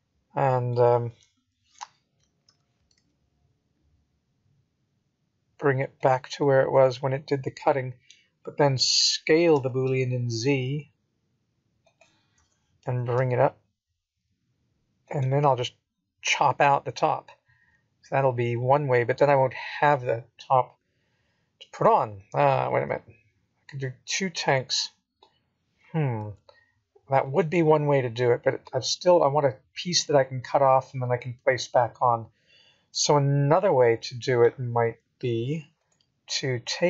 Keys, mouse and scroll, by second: 0.2 scroll up 2, 0.7-1.3 scroll down 3, 1.3 middle click, 4.9 click, 6.3 Tab, 8.9 scroll down 2, 9.5 click, 12.1 KP_7, 13.4 g, 17.3 middle click, 20.1 KP_1, 21.2 g, 25.1 middle click, 28.3 s, 31.1 g, 34.2 middle click.